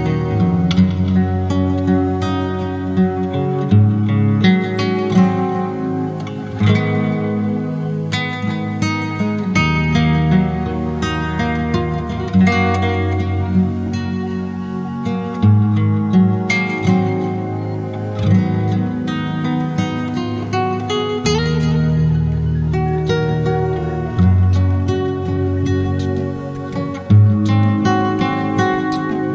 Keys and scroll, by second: 23.0 Down, 23.1 Down.